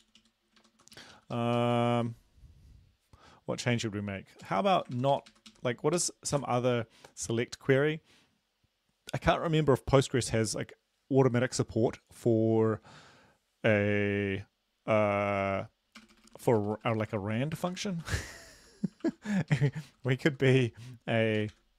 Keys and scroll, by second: 0.0 Down, 0.2 Down, 0.6 Right, 0.8 Right, 1.0 Left, 1.6 ctrl+Left, 2.1 Right, 4.5 Down, 4.8 Right, 5.3 ctrl+Right, 5.5 ctrl+Right, 6.4 Right, 16.0-19.1 typing, 19.4 Left, 19.5 Left, 19.7 Left, 19.9 Left, 20.2 Left, 20.4 Left, 21.4 typing.